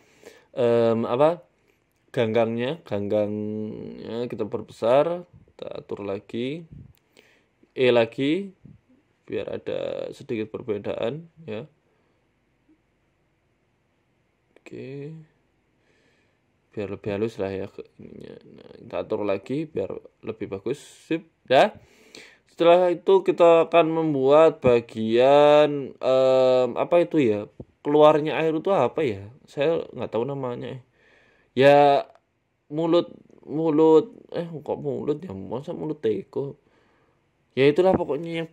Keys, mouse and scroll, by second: 0.0 scroll down 1, 0.2 shift+middle click, 1.0 Tab, 1.2 scroll up 1, 1.5 shift+middle click, 1.8 scroll up 3, 2.4 right click, 2.9 ctrl+z, 3.1-3.5 scroll down 3, 3.3 Tab, 3.7 s, 4.7 Tab, 5.1 right click, 5.8 right click, 6.7 right click, 8.1 e, 8.7 e, 9.7 right click, 10.6 click, 13.4 click, 15.0 click, 16.5 Tab, 16.7 scroll down 2, 17.0 scroll up 4, 17.2 Tab, 17.6 right click, 18.1 right click, 19.0 right click, 20.6 Tab, 20.6 right click, 20.7 scroll down 2, 22.1 scroll down 6, 22.4 shift+middle click, 23.4 scroll up 2, 24.0 right click, 24.1 Tab, 24.5 shift+a, 26.2 r, 27.4 s, 28.3 g, 29.6 scroll up 3, 32.0 click, 32.8 click, 34.0 click, 34.5 s, 35.2 click, 35.9 s, 38.1 g.